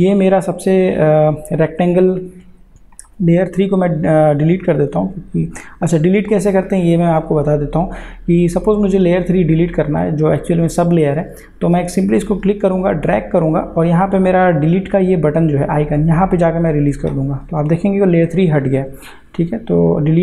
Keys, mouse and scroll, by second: 11.6-20.2 drag.